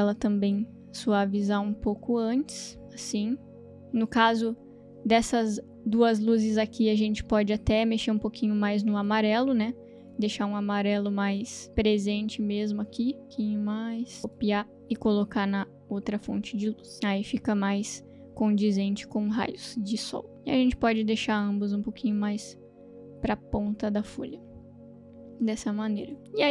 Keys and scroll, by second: 1.5 space, 14.8 ctrl+c, 16.9 ctrl+v.